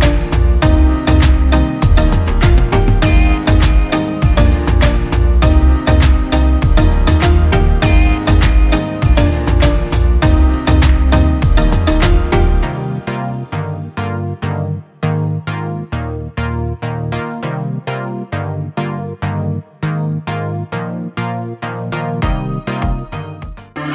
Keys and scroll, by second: 5.9-7.3 typing, 6.9 Return, 19.2 i, 21.5 space.